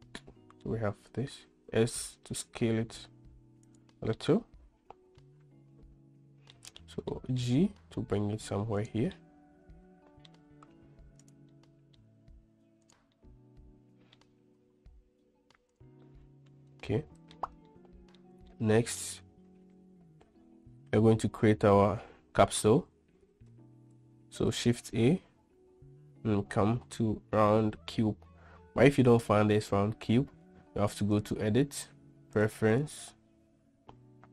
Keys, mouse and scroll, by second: 0.5-0.9 middle drag, 1.8 s, 4.4-6.9 middle drag, 7.4-7.7 middle drag, 7.8 g, 9.4-10.6 middle drag, 10.6 g, 11.8 middle click, 12.3 g, 13.5-14.4 middle drag, 14.7 g, 16.4-17.6 middle drag, 18.0-18.5 shift+middle drag, 18.8-19.3 middle drag, 31.4-34.0 drag.